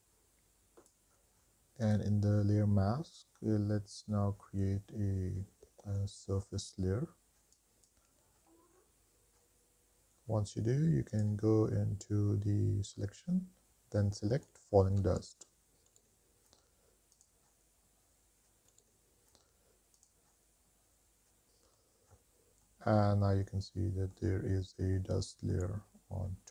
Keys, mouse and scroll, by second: 2.1 click, 7.7 click, 8.9-10.0 scroll down 3, 10.1 click, 11.3-17.8 drag, 22.5 shift+middle click, 22.5-23.9 scroll up 4, 23.0-24.7 middle drag, 24.7-25.1 scroll down 3, 25.3 shift+middle click, 26.1-26.5 middle drag.